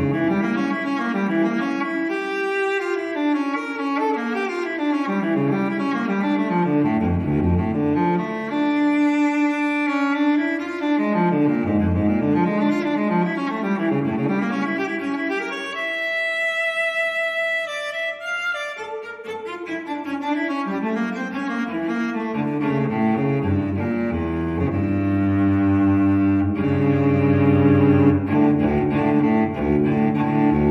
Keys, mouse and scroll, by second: 0.6 click, 1.2-2.5 typing, 2.9 click, 5.0 click, 8.5 click, 9.7 click, 11.1 click, 11.9 1, 12.2 5, 14.5 click, 15.8 4, 16.8 click, 17.8 1, 19.3 click, 21.0 click, 21.5 2, 22.7 click, 24.4 click, 24.8-26.3 typing, 26.6 scroll down 1, 27.0 click, 28.0 scroll down 1, 28.6-29.0 scroll up 1, 30.1 click.